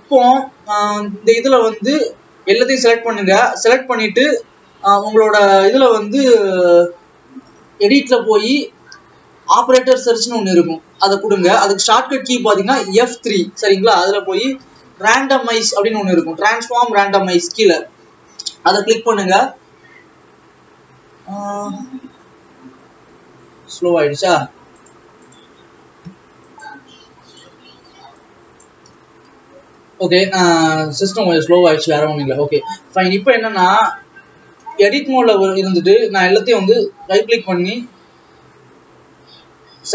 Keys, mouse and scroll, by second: 1.0 Tab, 2.2 a, 6.9-25.3 drag, 27.4 ctrl+s, 28.3 click, 29.2 a, 32.5 ctrl+s.